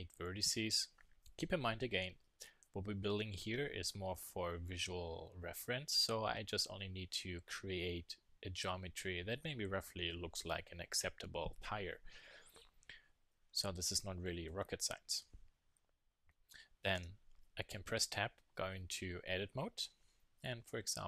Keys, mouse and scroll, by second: 16.9 Tab, 20.6 s.